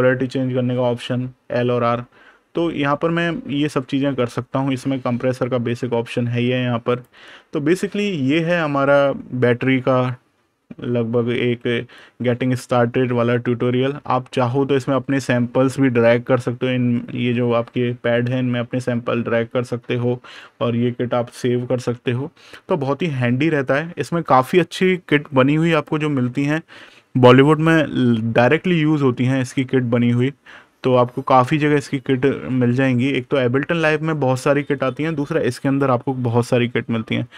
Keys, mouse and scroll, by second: 1.5 super+KP_Subtract, 4.7 super+KP_Add, 5.4 super+KP_Subtract, 6.7 KP_Subtract, 16.0 super+KP_Add, 17.3 super+KP_Subtract, 25.5 click, 26.5-27.9 scroll down 1, 28.8 super+KP_Add, 29.1-32.1 scroll down 1, 32.2-32.6 scroll down 1, 33.8 super+KP_Subtract, 34.3 scroll down 1.